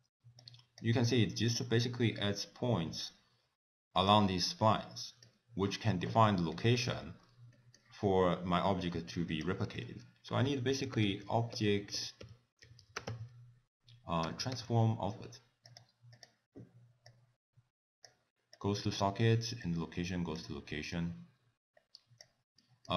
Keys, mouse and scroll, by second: 0.4 click, 1.6 click, 6.5 middle click, 6.5 click, 7.3 scroll down 2, 7.5 middle click, 8.9 middle click, 9.3 click, 9.8 ctrl+a, 10.9 b, 11.7 BackSpace, 11.8 BackSpace, 17.1 click, 18.5 click, 19.7 click, 21.0 click, 22.6 middle click.